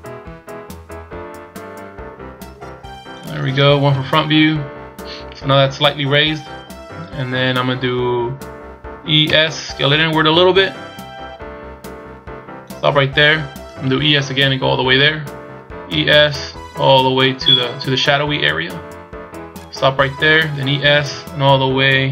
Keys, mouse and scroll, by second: 3.8 KP_1, 8.9 e, 15.6 e, 20.5 e.